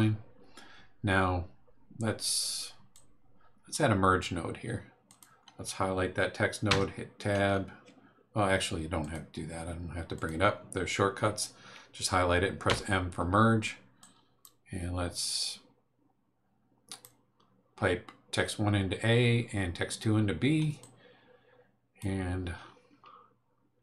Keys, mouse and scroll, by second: 2.9-3.9 drag, 5.1 click, 6.7 Tab, 9.0 click, 10.1 click, 12.7 m, 14.0 click, 15.3-17.2 drag, 20.8-22.2 drag.